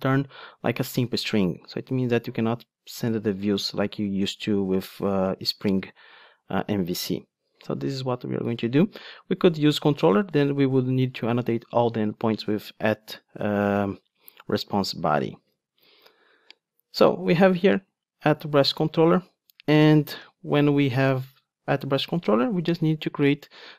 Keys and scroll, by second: 5.8 ctrl+Tab, 13.7 super+b, 15.5 super+b, 15.6 ctrl+Tab, 20.2 Tab.